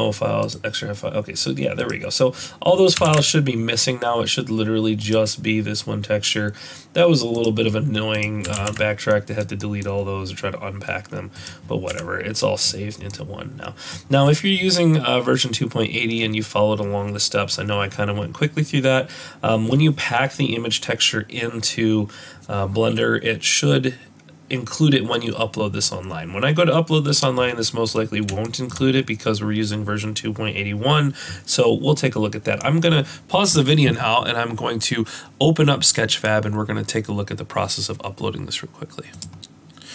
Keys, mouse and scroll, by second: 11.4 ctrl+s, 11.4 middle click, 11.4 click, 11.4 scroll up 1, 11.9 z, 13.1 middle click, 18.5-19.1 scroll down 1, 19.1-20.0 scroll up 1, 27.6-27.9 scroll down 1, 27.9 middle click, 28.4 shift+middle click.